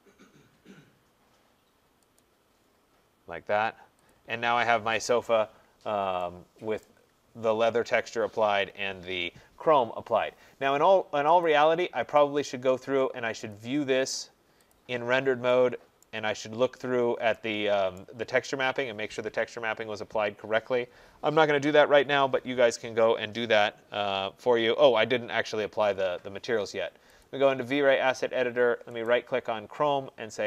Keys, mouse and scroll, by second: 2.2 click, 4.1 click, 5.0 click, 5.7 middle click, 5.8 middle click, 6.8 right click, 7.2 middle click, 7.2 middle click, 7.3 middle click, 11.5 click, 12.4 right click, 13.5 click, 16.0 right click, 16.3 middle click, 16.4 middle click, 16.9 middle click, 18.0 right click, 27.3 click, 29.1 right click.